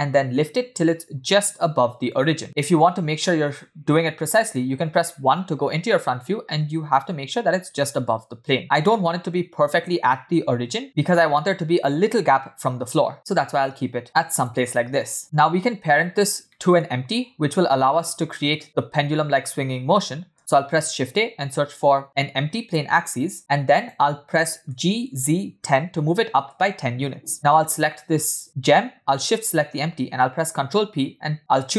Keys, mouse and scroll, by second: 0.2 g, 2.6-4.3 middle drag, 4.3 KP_1, 5.8 scroll up 2, 6.1 scroll down 1, 8.9 g, 16.0 scroll down 3, 16.5 middle click, 21.0 shift+a, 24.7 g, 27.5 click, 29.3 shift+click, 30.7 ctrl+p.